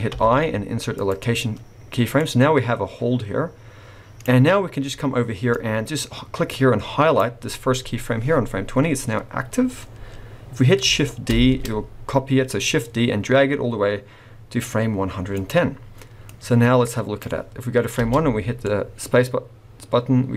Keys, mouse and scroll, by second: 0.1 i, 2.2 click, 5.5 click, 11.3 shift+d, 16.3 click, 18.0 space, 18.5 scroll down 1, 18.6 middle click.